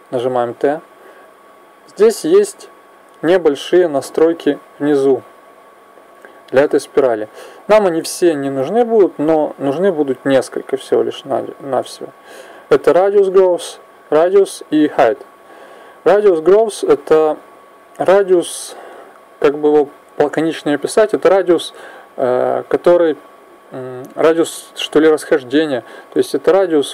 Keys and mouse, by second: 4.6-8.5 drag, 17.2-20.3 drag.